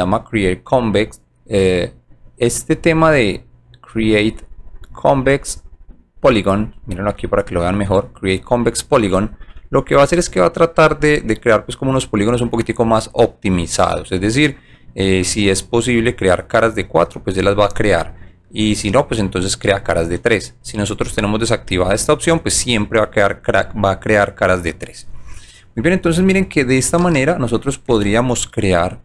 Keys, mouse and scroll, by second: 4.0-5.1 drag, 27.9 g, 28.6-29.0 alt+drag.